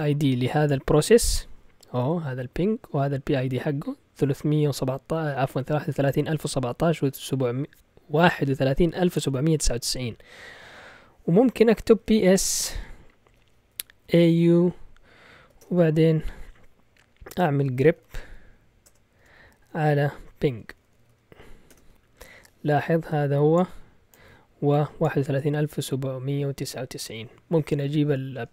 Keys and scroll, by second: 11.7-14.5 typing, 15.6 typing, 17.5-22.1 typing.